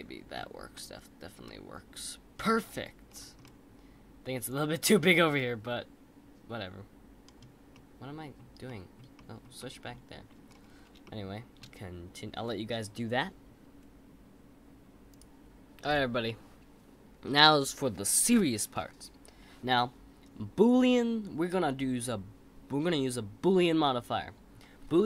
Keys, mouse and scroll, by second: 2.5-3.4 scroll down 7, 3.4-6.4 middle drag, 7.7-8.9 middle drag, 9.1-10.4 middle drag, 10.4-11.0 scroll up 3, 11.0-14.1 shift+middle drag.